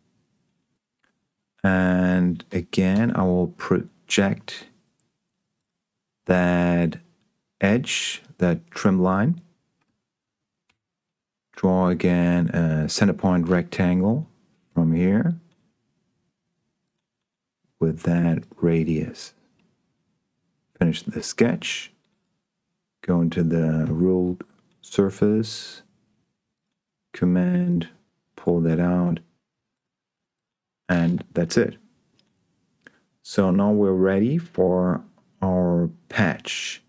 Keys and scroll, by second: 3.2 p, 10.9 s.